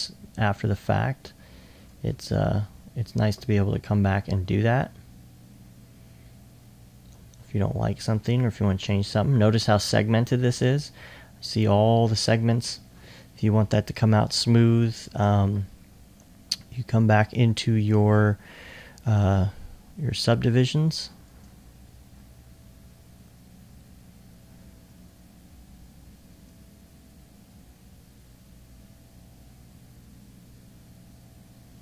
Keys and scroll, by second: 9.9 alt+2, 10.3 alt+2.